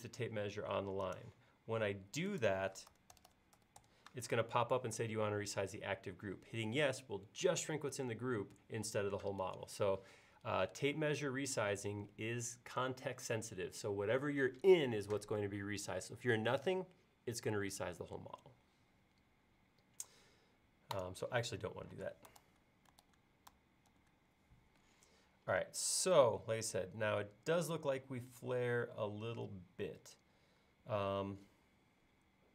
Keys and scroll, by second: 2.9 typing, 4.3-5.0 typing, 22.1 space, 22.4 super+z, 23.9 super+z.